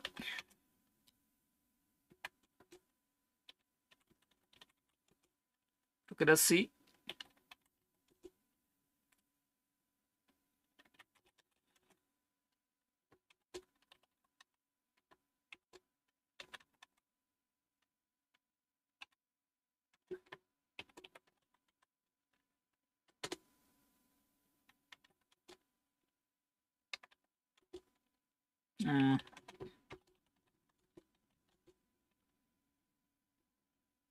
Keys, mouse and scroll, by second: 0.0-0.6 typing, 2.0-5.4 typing, 6.8-8.2 typing, 10.7-12.0 typing, 13.2-17.3 typing, 18.9-21.2 typing, 21.6 Tab, 22.9-23.7 typing, 25.0 typing, 26.9-27.5 typing, 28.7-32.3 typing, 33.5-34.1 typing.